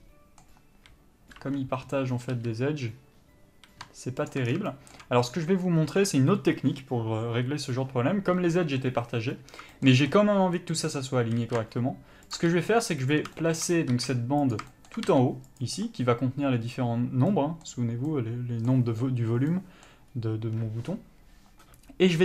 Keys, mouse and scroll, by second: 1.4 l, 2.3 r, 4.3 ctrl+click, 11.4 r, 12.3 ctrl+click, 12.5 g, 13.1 click, 14.0 s, 14.5 click, 15.1 g, 17.3 middle click, 20.1-22.2 scroll up 1.